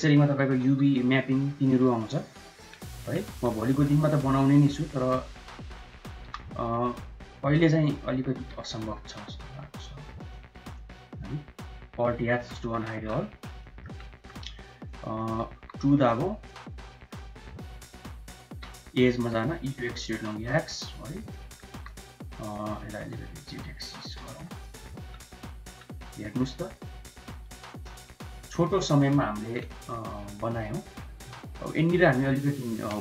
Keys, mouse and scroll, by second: 0.1 s, 1.3 s, 2.8 KP_1, 4.4-4.8 drag, 6.1 h, 6.6 click, 7.2 click, 8.2 g, 10.8 middle click, 12.2 alt+h, 13.1 KP_1, 13.5 middle click, 14.0 Tab, 15.1 middle click, 15.3 3, 16.8 middle click, 18.3 2, 18.6 click, 19.2 e, 21.2 middle click, 21.5 3, 21.8 click, 22.8 e, 24.2 Tab, 24.5 click, 24.6 middle click, 25.2 drag, 25.2 middle drag, 26.1 middle click, 26.7 middle click, 28.8-29.2 middle drag, 29.7-30.9 middle drag, 31.5 shift+right click.